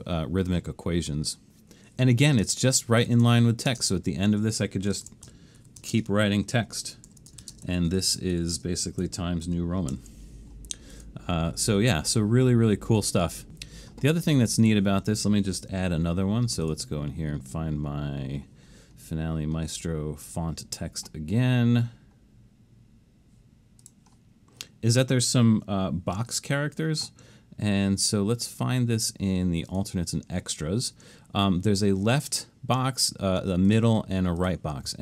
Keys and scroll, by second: 3.7 space, 5.1-10.5 typing, 26.3 alt+shift+super+s.